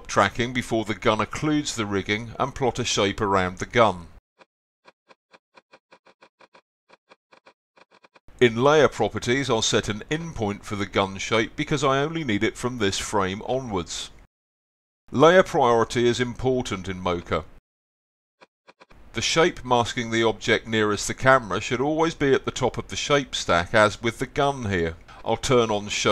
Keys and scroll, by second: 10.4-11.4 typing, 18.1 z, 25.7 x.